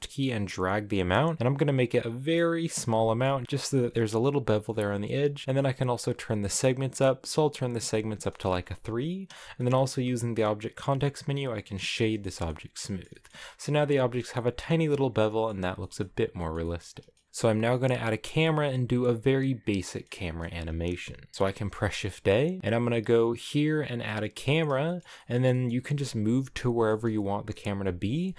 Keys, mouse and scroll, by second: 2.9 middle click, 3.2 scroll up 1, 3.4-4.6 scroll down 1, 5.9-8.2 drag, 8.2 middle click, 8.5-9.2 scroll down 2, 9.3-11.3 shift+middle drag, 11.3 w, 11.9 shift+middle click, 12.2 a, 12.4 middle click, 13.3-14.2 scroll up 5, 14.2-15.4 middle drag, 15.4-16.3 scroll down 8, 15.7 shift+middle click, 16.3-24.1 shift+middle drag, 24.1 shift+a, 24.7 shift+middle click, 25.0 scroll up 1, 25.2 middle click, 25.6-26.0 scroll down 1, 26.5-28.3 shift+middle drag.